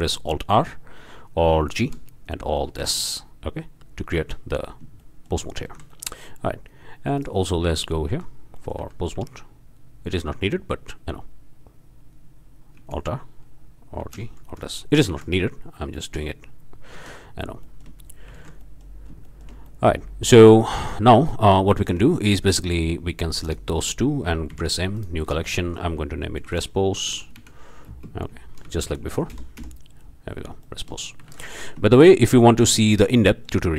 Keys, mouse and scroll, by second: 0.5 alt+r, 1.8 alt+g, 2.8 alt+s, 4.2 Tab, 5.0-5.4 shift+middle drag, 5.4 shift+scroll up 1, 5.7 alt+shift+a, 7.6 Tab, 8.8 a, 12.7 alt+r, 14.0 alt+g, 15.1 alt+s, 15.4 alt+click, 16.0-16.3 shift+drag, 16.9 Tab, 17.6-18.0 shift+drag, 18.5 alt+a, 18.6-19.0 alt+drag, 19.2-19.6 alt+shift+drag, 19.7 shift+click, 19.8 shift+middle click, 20.5 shift+click, 21.3-21.7 scroll up 1, 21.7-22.0 shift+drag, 22.4-22.7 shift+drag, 23.4 shift+click, 24.5 m, 24.9 click, 26.4-29.0 typing, 29.3 Return, 30.3-30.6 shift+drag, 31.0-31.4 shift+scroll up 1, 31.4 alt+shift+a, 33.0 shift+scroll up 1, 33.3 shift+middle click, 33.4 shift+drag.